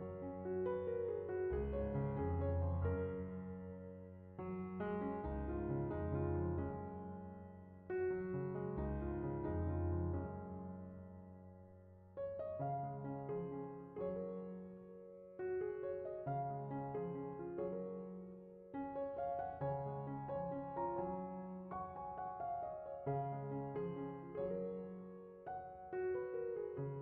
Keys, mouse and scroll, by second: 0.2 x, 1.1-2.5 scroll down 4, 2.5-3.8 middle drag, 3.8 click, 4.2 click, 5.7 scroll down 10, 6.1 click, 8.5 click, 9.3 right click, 10.6 middle click, 11.4 click, 13.8-15.4 drag, 16.1 scroll down 6, 16.3-18.4 middle drag, 18.7-20.6 drag, 23.9-25.1 drag, 26.6 middle click, 26.8 click.